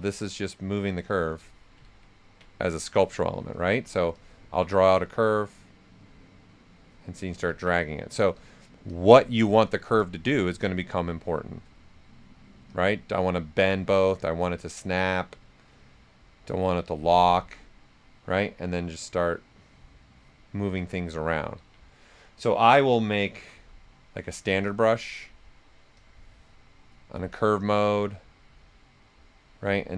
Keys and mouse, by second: 1.8 ctrl+z, 3.5 right click, 4.1-7.6 drag, 7.6 ctrl+z, 7.8 right click, 8.6-9.4 typing, 8.9 click, 12.7 click, 12.7 typing, 18.2-20.6 drag, 18.2 typing, 20.6 right click, 21.3 ctrl+z, 22.5-23.8 typing, 25.9 click, 28.6 click, 28.6 typing, 29.6 right click.